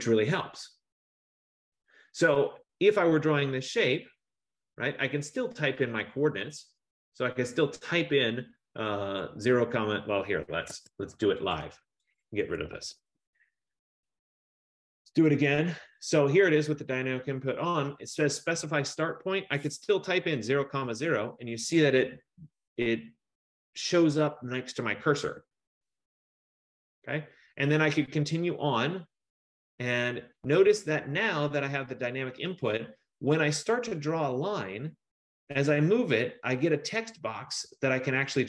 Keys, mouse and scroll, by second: 10.8 Escape, 11.6 click, 12.4-13.5 typing, 12.4 click, 15.3 click, 20.2-21.3 typing, 25.3 Return, 26.5 F15.